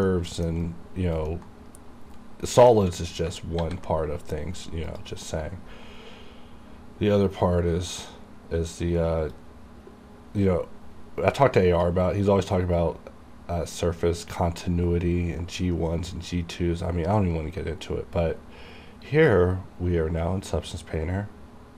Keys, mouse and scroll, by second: 0.2 alt+middle click, 0.7 alt+right click, 1.4 alt+middle click, 3.7 ctrl+s, 5.0 click.